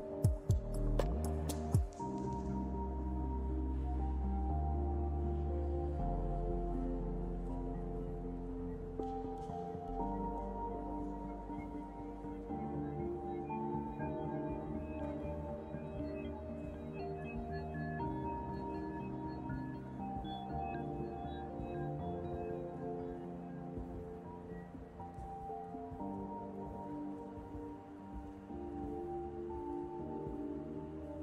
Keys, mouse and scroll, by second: 1.5 f, 4.0 g, 7.5 r, 10.3 click, 10.8 r, 14.2 click, 16.6 g, 18.2 r, 20.4 scroll down 2, 21.1 Tab, 21.1-21.5 scroll down 1, 21.5 middle click, 24.6 click, 27.4 click, 28.0 scroll down 2, 28.4-28.7 scroll up 1, 29.1 click, 29.6 KP_5, 29.9 KP_Decimal.